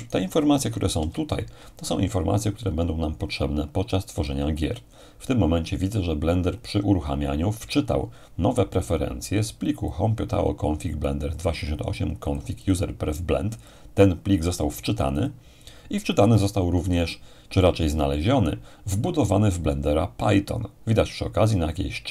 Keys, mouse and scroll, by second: 1.0 ctrl+alt+shift+=, 2.7-3.6 scroll up 2, 9.9-16.7 drag.